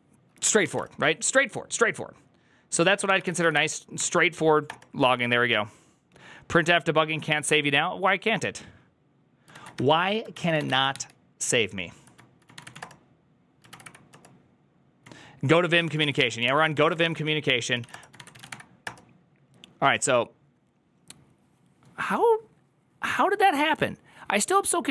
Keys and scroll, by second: 2.5-3.4 typing, 3.9 Up, 4.5 Return, 10.2 ctrl+a, 10.2 ctrl+c, 10.2-10.6 typing, 10.3 ctrl+c, 10.4 ctrl+:, 10.8 Return, 10.8 ctrl+h, 12.2-14.2 typing, 15.6-18.9 typing, 16.8 Return.